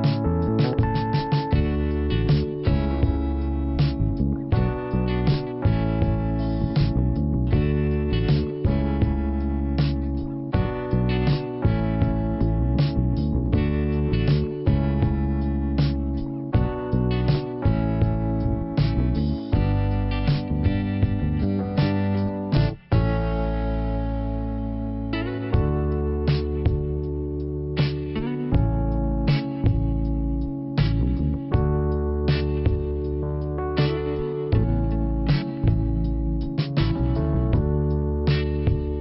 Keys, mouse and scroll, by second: 4.2 middle click, 8.1 middle click, 10.0 click, 11.0 click, 13.5 click, 14.9 click, 15.4 click, 16.9 click, 18.1 click, 19.5 scroll down 1, 23.8 click, 26.8 click, 28.2 click, 30.7 click, 34.3 click, 35.3 click, 38.9 click.